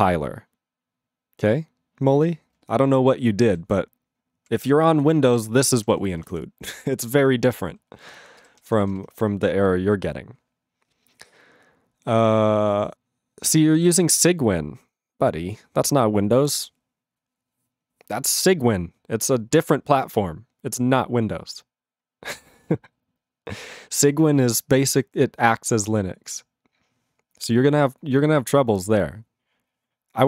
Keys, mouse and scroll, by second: 5.7 ctrl+space, 5.8 ctrl+n, 5.9 ctrl+n, 6.2 ctrl+n, 6.3 ctrl+n, 7.3 ctrl+n, 8.4 ctrl+g, 8.5 ctrl+p, 8.7 ctrl+p, 9.2 ctrl+p.